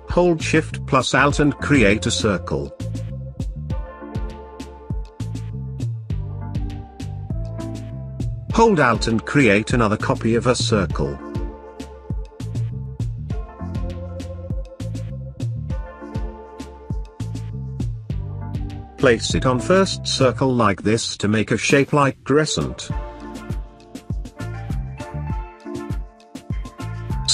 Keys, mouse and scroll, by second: 0.7-5.3 alt+shift+drag, 6.7-23.4 alt+drag, 24.9-27.3 drag.